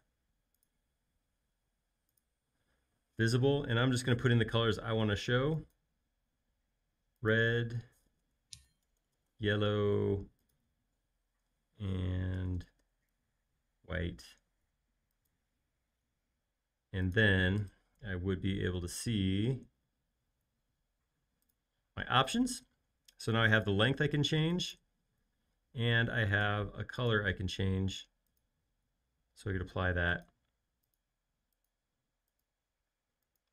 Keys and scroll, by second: 3.6-4.8 typing, 8.1-9.8 typing, 12.1-13.6 typing.